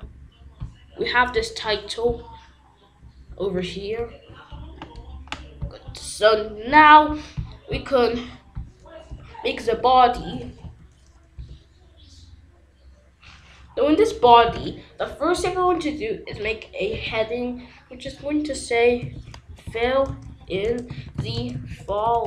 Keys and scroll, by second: 9.0 Return, 9.6-11.1 typing, 11.3 Return, 14.4 h, 15.3 Return, 16.9 ctrl+s, 18.7-22.2 typing.